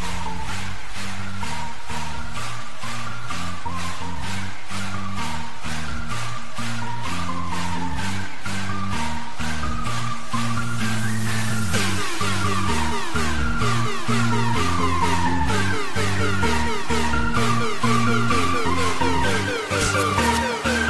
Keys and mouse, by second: 0.2 click, 1.4 click, 3.3 click, 6.2 click, 6.2 u, 8.6 click, 8.7 click, 11.5 click, 13.4 click, 16.3 click.